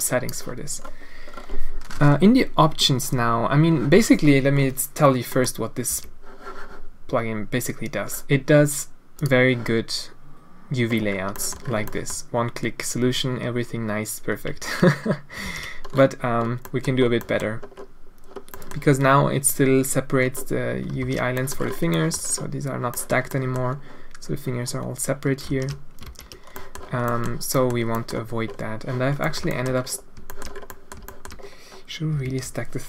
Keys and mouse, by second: 5.4 middle click, 5.9 a, 9.2-10.8 drag, 11.4 middle click, 12.0 middle click, 15.4 ctrl+z, 16.7 middle click, 17.2 click, 18.6 click, 21.0 ctrl+shift+z, 21.4 middle click, 22.0 middle click, 23.0 middle click, 23.4 middle click, 25.5 ctrl+shift+z, 26.1 ctrl+z, 26.6 middle click, 27.2 middle click, 27.5 middle click, 28.0 middle click, 29.2 middle click, 29.5 shift+middle click, 30.2 shift+middle click, 30.7 click, 31.0 shift+click, 32.2 alt+a.